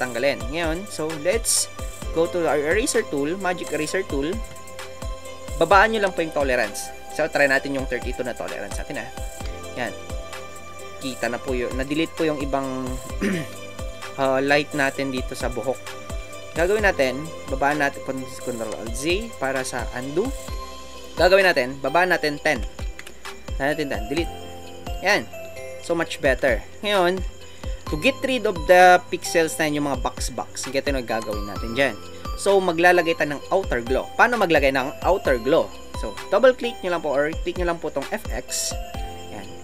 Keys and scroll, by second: 0.0 ctrl+z, 22.5 KP_1.